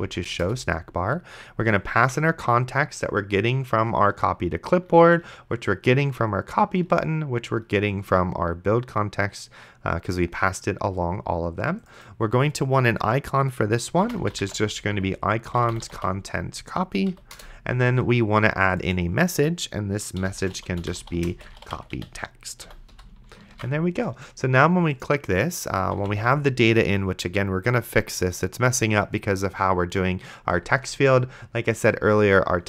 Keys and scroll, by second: 0.0-0.4 typing, 0.4 Return, 2.0 Tab, 14.0-16.5 typing, 17.1 Down, 17.4 Return, 19.9-22.9 typing, 22.7 End, 23.8 ctrl+s, 25.9 d.